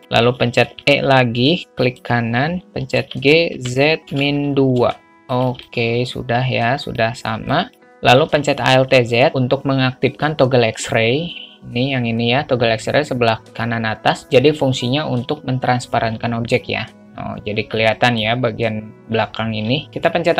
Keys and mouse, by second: 0.9 e, 3.3 g, 6.0-7.3 middle drag, 8.5 alt+z, 16.8-18.5 alt+middle drag.